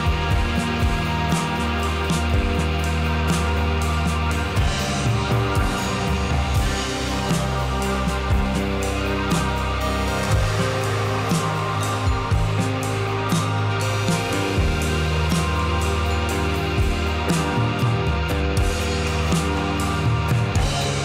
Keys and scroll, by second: 5.1 Page_Down, 18.1 0, 20.0 0.